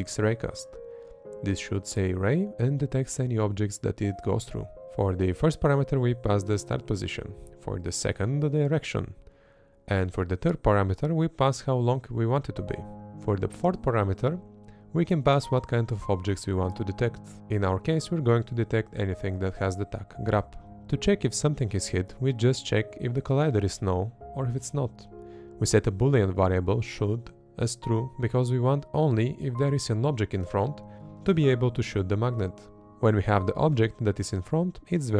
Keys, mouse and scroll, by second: 0.0-7.6 typing, 0.1 Down, 0.7 Down, 1.3 Down, 1.9 Down, 2.5 Up, 3.3 Up, 3.9 Up, 4.3 Up, 4.7 Up, 5.6 Down, 7.5 Up, 8.5 Up, 8.7-13.1 typing, 9.2 Down, 10.0 Up, 10.7 Up, 11.3 Down, 12.1 Down, 12.4 Up, 12.9 Up, 13.8 Up, 14.1-21.9 typing, 14.9 Down, 16.0 Down, 16.5 Up, 17.6 Up, 18.3 Down, 19.3 Up, 19.8 Up, 20.3 Up, 21.0 Down, 23.0 space, 23.7 space, 24.4 space.